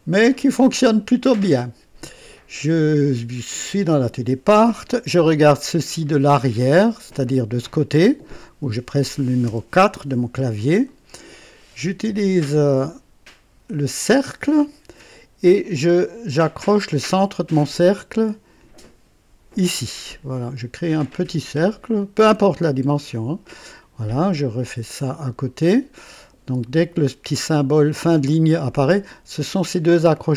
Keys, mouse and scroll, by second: 0.4 click, 9.4 KP_4, 10.4 scroll up 1, 10.8 right click, 14.0 click, 19.4 click, 21.9 click, 25.6 click.